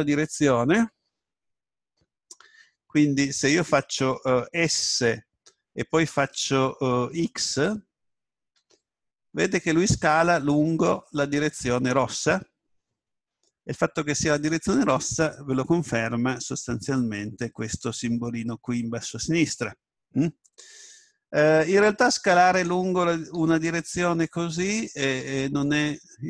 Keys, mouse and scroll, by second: 4.7 s, 14.7 right click, 21.5 s, 23.3 s.